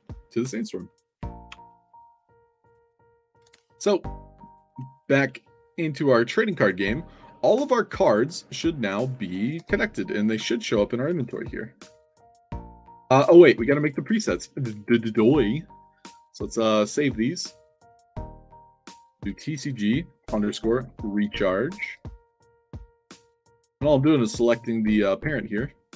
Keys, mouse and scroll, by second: 1.4 alt+Tab, 2.5 alt+click, 3.3 alt+Tab, 4.3 alt+click, 5.0 click, 5.9-6.7 middle drag, 7.9 click, 8.4 click, 8.7 click, 10.1 click, 11.1 c, 13.7 click, 14.1 drag, 15.0 f, 16.3 click, 17.1 click, 18.3 click, 19.1 shift+c, 20.3-22.5 typing, 22.6 click, 23.2 click.